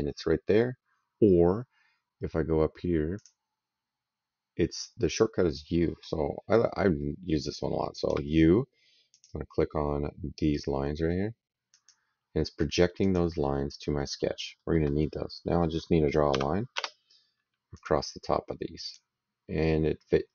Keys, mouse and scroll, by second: 3.0 click, 7.9 u, 9.6 click, 11.5 click, 12.9 click, 14.4 middle click, 16.6 space, 17.6 click, 18.7 click, 20.2 middle click.